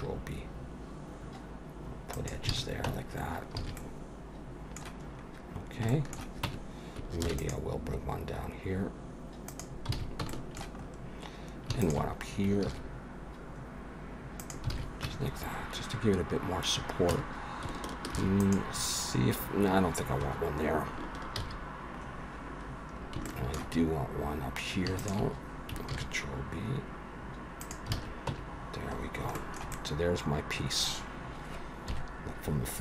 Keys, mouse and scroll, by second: 2.5 alt+a, 2.9 Tab, 3.0-3.5 scroll down 6, 3.6 alt+a, 3.7 middle click, 5.0-5.5 scroll up 1, 5.5-5.8 scroll down 1, 5.8 scroll down 1, 5.9 shift+middle click, 6.4 Tab, 7.2 ctrl+r, 9.9 alt+a, 10.3 shift+middle click, 10.8-11.7 scroll up 1, 11.7 scroll up 3, 11.8 alt+shift+click, 12.7 ctrl+b, 14.7 alt+a, 15.0 Tab, 15.3-16.3 scroll down 5, 16.3-17.1 scroll up 4, 17.1 Tab, 18.1 ctrl+r, 21.5 ctrl+z, 22.0-22.9 scroll down 1, 22.9 scroll down 2, 23.2 shift+middle click, 23.8-24.4 scroll up 2, 25.0 alt+shift+click, 25.9 ctrl+b, 27.9 alt+a, 28.3 Tab, 28.5-29.3 scroll down 9, 29.3 shift+middle click, 29.7 middle click, 31.9 KP_1.